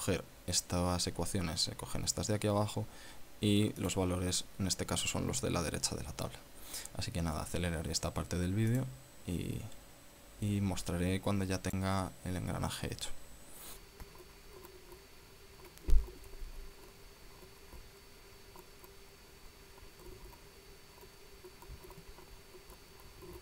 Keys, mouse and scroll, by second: 4.6 click, 7.3-8.0 scroll down 4, 9.6 click, 13.8 click, 14.4 click, 14.4-15.4 typing, 15.4 click, 15.6 click, 15.9 click, 16.6 click, 16.7 click, 17.0 drag, 17.4 click, 17.6 click, 17.8 ctrl+v, 17.9-18.2 scroll down 2, 19.1 click, 19.6 scroll up 2, 20.3 KP_Subtract, 20.9 click, 21.5 r, 22.1 right click, 22.2 shift+right click, 22.7-23.4 typing, 23.3 Delete.